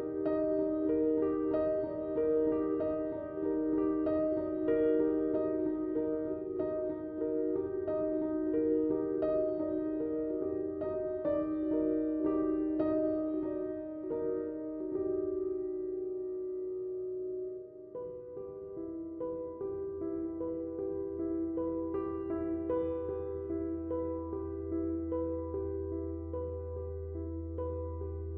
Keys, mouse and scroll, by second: 9.2 click, 25.3 click, 25.7 typing.